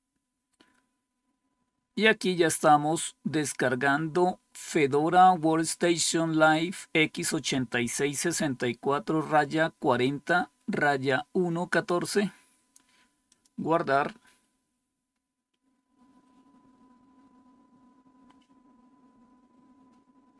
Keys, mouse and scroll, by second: 13.2 click.